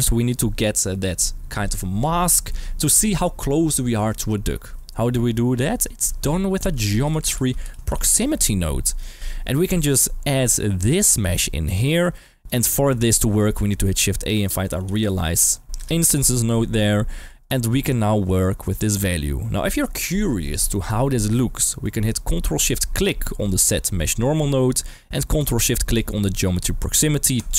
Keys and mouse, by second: 5.5 click, 6.2 shift+a, 8.8 click, 10.8-11.6 drag, 12.0-12.4 drag, 13.6 shift+a, 16.9 g, 17.4 click, 17.8-18.7 drag, 21.8 middle click, 23.4 ctrl+shift+click, 24.3-24.8 drag, 26.0 ctrl+shift+click.